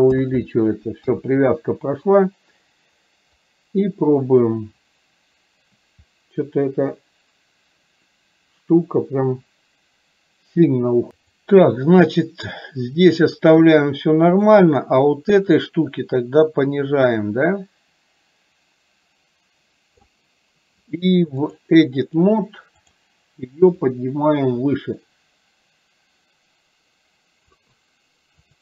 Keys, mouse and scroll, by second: 3.5-11.1 drag, 11.2 click, 12.7 click, 14.3 click, 16.1-20.1 drag, 21.5 click, 22.1-23.1 drag, 24.0-27.6 drag.